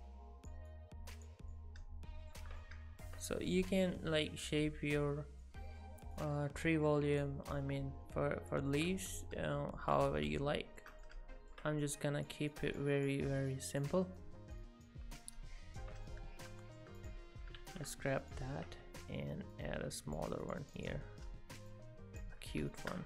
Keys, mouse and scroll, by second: 1.5 middle click, 2.6 middle click, 4.5 middle click, 6.2 click, 7.6 middle click, 9.1 middle click, 11.0 middle click, 11.8 click, 12.5 click, 13.5 click, 14.2 click, 15.2 middle click, 16.1 middle click, 16.2 Tab, 16.2 click, 16.2 shift+middle click, 16.6 shift+middle click, 17.0 click, 17.6 shift+d, 18.7 Tab, 19.6 click, 20.4 shift+click, 21.7 click, 22.4-22.7 scroll up 5, 22.7 shift+middle click.